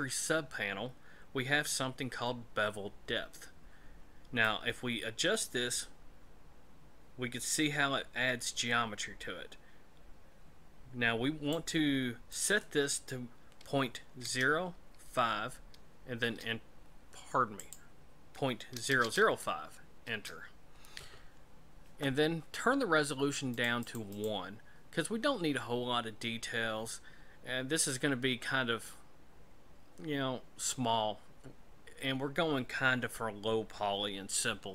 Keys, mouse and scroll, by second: 0.0-0.9 scroll down 3, 0.9-2.4 scroll down 2, 4.4 click, 12.3 click, 17.5 click, 19.0 KP_0, 23.5 click, 23.8 click, 24.1 click.